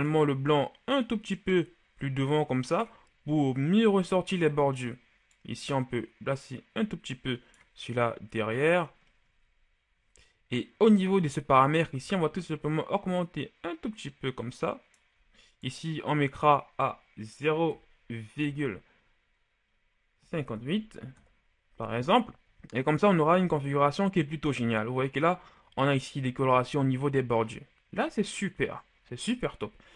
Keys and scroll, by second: 17.6 KP_0, 18.3 KP_Decimal, 20.1 KP_5, 20.3 KP_8, 21.0 Return, 23.1 a.